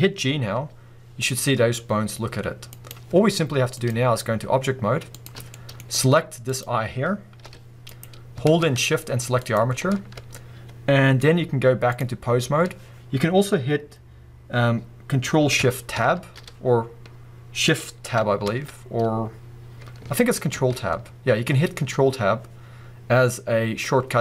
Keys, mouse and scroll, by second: 0.6 g, 2.8 right click, 3.8-5.5 drag, 5.5-6.5 middle drag, 5.7-6.5 scroll up 2, 6.5 click, 7.4 g, 8.0 right click, 9.4 shift+click, 11.9-24.2 drag, 16.8 ctrl+shift+Tab, 18.5 shift+Tab, 20.6 ctrl+Tab.